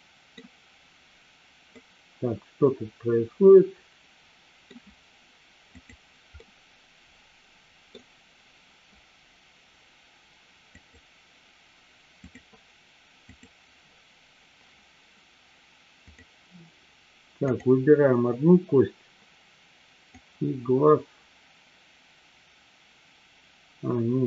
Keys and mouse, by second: 1.8-4.8 middle drag, 5.7 click, 6.4-7.9 middle drag, 10.8 click, 12.2 click, 13.3 click, 16.1 click, 17.4-19.1 drag, 20.3-24.2 drag.